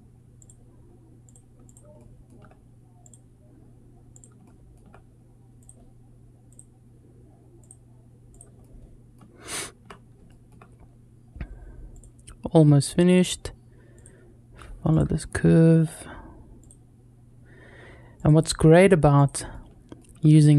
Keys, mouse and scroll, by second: 1.8 shift+middle click, 4.3 shift+middle click, 8.5 shift+middle click, 9.2 scroll down 1, 9.8 scroll down 1, 10.1 shift+middle click, 15.0 shift+middle click, 19.4 shift+middle click.